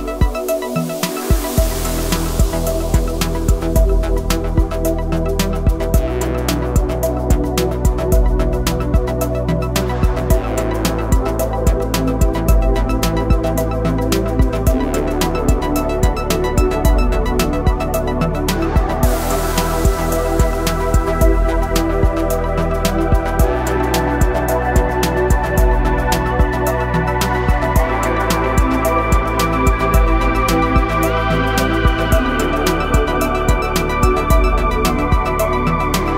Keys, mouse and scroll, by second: 3.1 typing, 10.3 typing, 18.1 ctrl+j, 19.2 click, 21.8 click, 21.8 typing, 22.9 click, 23.8-26.3 drag, 26.9-36.1 drag, 26.9 typing.